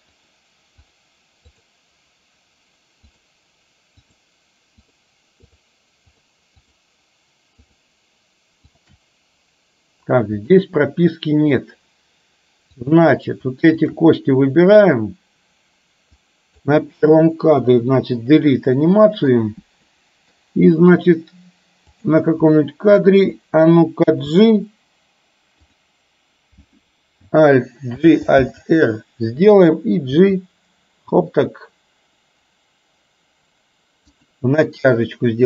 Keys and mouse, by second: 0.8 shift+click, 1.6 shift+click, 3.2 shift+click, 4.1 shift+click, 4.9 shift+click, 5.4 shift+click, 6.8 shift+drag, 7.7 shift+click, 8.7 shift+click, 10.6-11.7 middle drag, 13.9 shift+click, 16.3 click, 17.7 Delete, 18.9 middle click, 19.9 middle click, 21.9 click, 22.6 middle click, 24.2 g, 28.1 alt+g, 28.4 alt+r, 30.3 g.